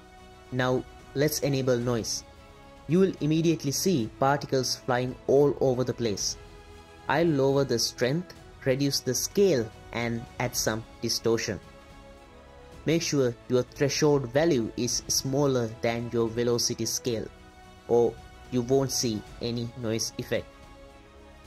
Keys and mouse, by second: 0.4 click, 1.8 click, 2.4 click, 6.2-6.9 drag, 9.0 click, 10.4 click, 11.3 click, 12.5 click, 13.8 click, 15.8 click, 16.5 click, 17.6 middle drag, 18.6 click, 19.2 click, 19.7-21.4 drag.